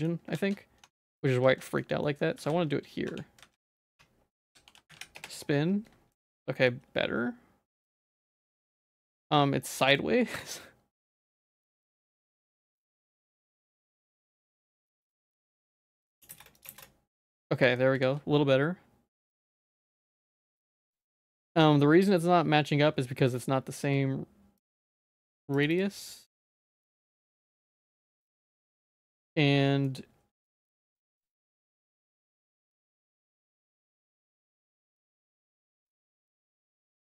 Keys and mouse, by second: 0.3 shift+s, 0.9 Tab, 1.0 middle click, 1.3 z, 1.6 shift+middle click, 2.0 middle click, 2.4 ctrl+s, 3.1 Tab, 3.4 a, 4.0 F3, 6.2 shift+click, 6.7-8.5 middle drag, 8.9 shift+click, 9.0 middle click, 9.7 middle click, 11.8-14.3 drag, 14.9 click, 15.9 click, 16.6 click, 17.5 middle click, 18.0 z, 20.2 ctrl+s, 20.5 z, 21.0 shift+middle click, 21.3 z, 24.6 click, 24.8 click, 24.9 click, 25.2 click, 25.3 click, 25.5 click, 25.7 click, 27.6 z, 28.1 middle click, 28.4 shift+middle click, 29.1 middle click, 30.8 click, 31.4 click, 31.6 click, 31.7 click, 31.9 click, 32.2 click, 32.3 click, 32.7-33.9 drag, 33.9 click, 34.1 click, 34.3 click, 34.7 click, 34.8 click, 35.8 z, 36.2 middle click.